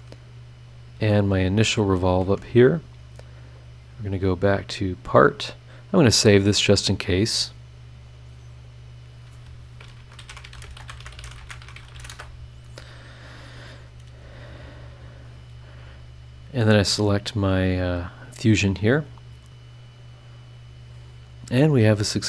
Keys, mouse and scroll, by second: 1.5 ctrl+click, 3.9 click, 5.3 click, 6.9 click, 9.1 click, 9.7-12.5 typing.